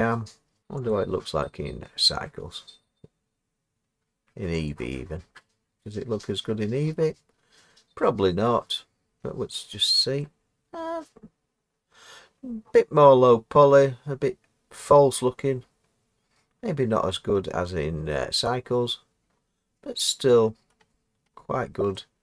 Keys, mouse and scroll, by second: 0.6 click, 0.9 click, 20.7 middle click, 20.8 middle click, 20.8 middle click, 20.9-21.2 scroll down 3, 21.2-22.2 scroll down 6.